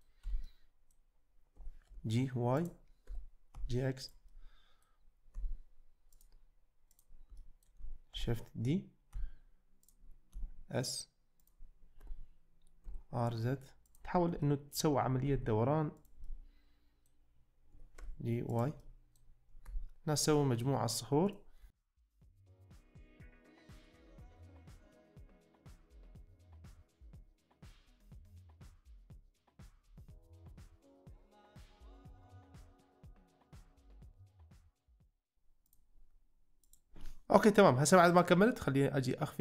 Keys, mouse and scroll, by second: 0.4 Tab, 0.5-0.9 middle drag, 1.6 g, 1.9 y, 2.6 click, 3.1 g, 3.5 x, 4.0-4.4 drag, 4.4-4.9 middle drag, 5.4 `, 6.2 click, 7.4 shift+middle click, 8.2 shift+d, 9.3 x, 9.9-10.4 drag, 10.4 s, 12.0 r, 12.9 z, 13.9-14.3 drag, 14.5 shift+middle click, 15.4 g, 16.4-17.0 middle drag, 18.0 y, 18.9 middle drag, 19.8 `, 20.4 shift+middle click, 21.3-21.7 drag, 21.9-25.9 typing, 22.3 middle click, 22.8 click, 23.8 middle click, 24.5 shift+middle click, 24.9 Tab, 25.5 Tab, 26.5 middle drag, 26.9 middle drag, 27.2-28.8 typing, 28.5 shift+middle click, 29.3 middle drag, 29.9 `, 30.2 g, 30.3 x, 30.6 middle click, 30.9 middle click, 31.1 shift+middle drag, 31.3 shift+middle click, 32.2 g, 32.3 x, 32.8 middle drag, 33.1 g, 33.2 y, 33.5 middle drag, 33.9-34.7 middle drag, 34.8 `, 35.0 shift+middle click, 35.7-36.5 drag, 36.7 click, 38.1-39.4 drag.